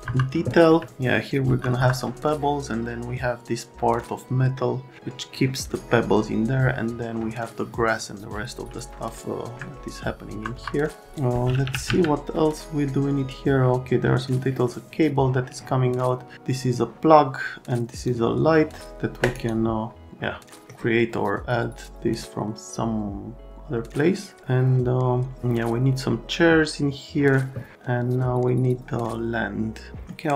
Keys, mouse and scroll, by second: 0.1 F3, 1.4 F3, 1.8 F3, 8.7 alt+middle click, 10.3 F3, 10.6 F3, 11.4-12.4 typing, 18.0 click, 20.2 middle click, 29.9 right click.